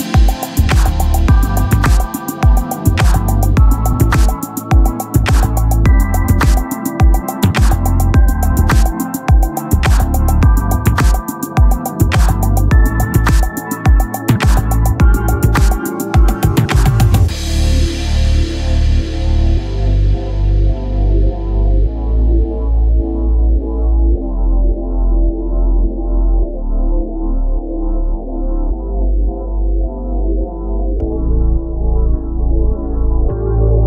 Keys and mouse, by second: 4.6 click, 6.7 click, 12.1 click, 14.0 click, 16.8 click, 19.6 click, 22.6 click, 25.1 click.